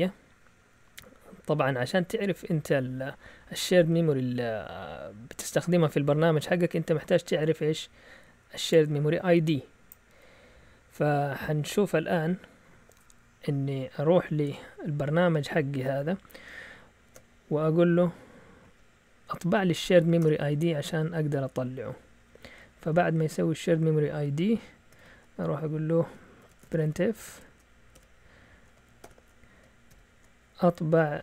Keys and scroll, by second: 14.4 alt+Tab, 17.0 ctrl+c, 18.6 Up, 18.7 Up, 19.5 Up, 20.2 Return, 21.0-22.0 Down, 21.7 Down, 22.6 Up, 22.8 Up, 23.6 Down, 24.9 0, 26.1-29.8 typing.